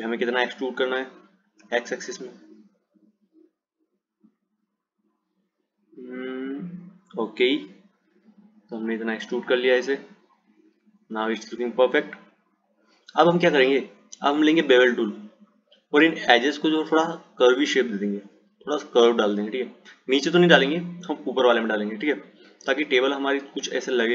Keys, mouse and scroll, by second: 0.3 click, 9.3 click, 15.1-18.2 drag, 19.4 click, 22.1 click.